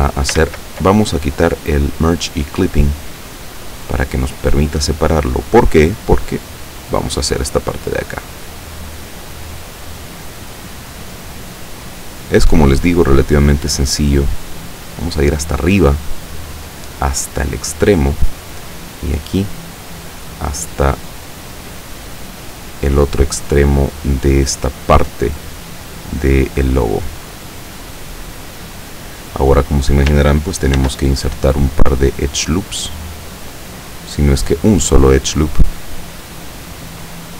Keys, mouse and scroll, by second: 0.5 ctrl+z, 2.0 click, 2.4 click, 3.4-5.7 drag, 6.0-7.7 drag, 8.2-9.7 drag, 10.3-11.5 drag, 12.4 middle click, 12.5 right click, 13.2-15.6 drag, 16.2-18.5 drag, 19.3 right click, 20.1-22.0 drag, 22.5-24.1 drag, 24.9 right click, 25.4 click, 27.1-29.1 drag, 30.8 ctrl+r, 32.0 click, 33.8 click, 34.5 right click, 35.2-36.7 drag, 37.2 click.